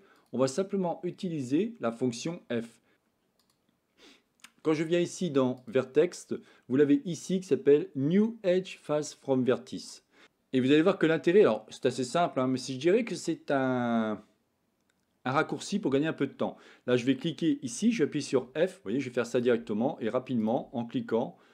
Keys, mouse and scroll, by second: 5.6-10.0 drag, 10.3 ctrl+z, 10.9-12.4 middle drag, 18.3 f, 19.2 click, 19.6 f, 20.3 click, 20.7 f.